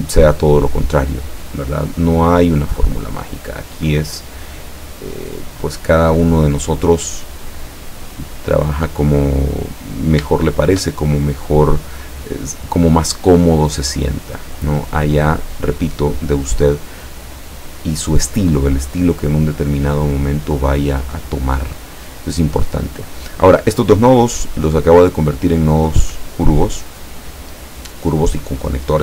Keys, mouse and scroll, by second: 1.5-5.6 drag, 8.1 click, 8.6 click, 9.4 click, 10.6 shift+click, 11.1-14.8 shift+drag, 18.8 click, 22.2 click, 23.4 click, 25.8 click, 26.9 click.